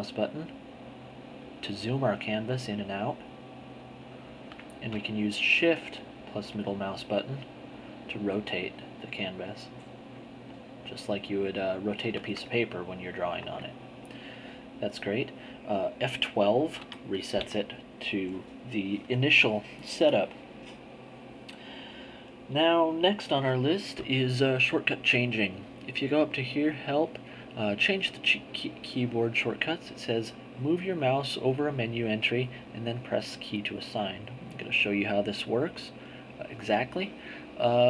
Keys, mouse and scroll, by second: 5.2-9.6 shift+middle drag, 9.6-13.3 shift+drag, 13.3 ctrl+middle click, 13.4 ctrl+click, 16.8 F12, 26.1 click, 28.0 click, 30.3-31.4 drag, 35.8 click.